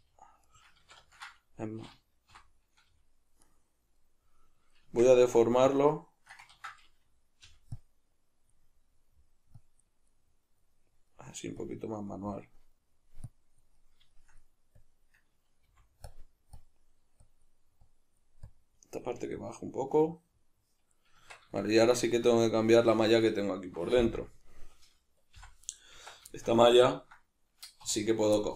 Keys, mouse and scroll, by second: 0.6 right click, 0.9 ctrl+z, 2.3 o, 3.5 right click, 4.2-5.6 middle drag, 4.8 Tab, 5.6-8.6 drag, 6.5 ctrl+z, 7.4 g, 8.6 middle click, 9.6 click, 10.1-11.6 middle drag, 11.6 click, 12.1-13.3 middle drag, 13.3 click, 13.8-14.8 middle drag, 14.8-16.1 drag, 15.7 f, 16.6-18.9 drag, 18.9-24.4 middle drag, 21.2 Tab, 24.0 Tab, 24.4 right click, 25.3 h, 25.7 right click, 25.9 Tab, 26.3-28.0 shift+middle drag, 27.9 2, 28.0 right click, 28.4-28.5 middle drag.